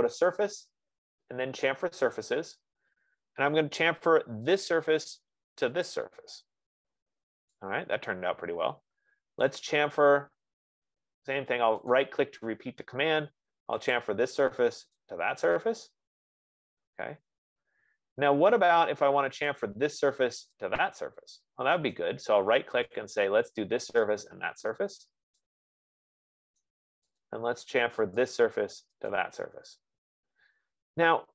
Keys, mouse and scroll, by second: 0.0 click, 2.6 click, 6.5 middle click, 9.9 right click, 12.3 right click, 14.4 click, 15.3 click, 20.2 click, 20.8 click, 22.6 right click, 23.4 click, 24.5 click, 27.6 right click, 28.7 right click, 29.5 right click.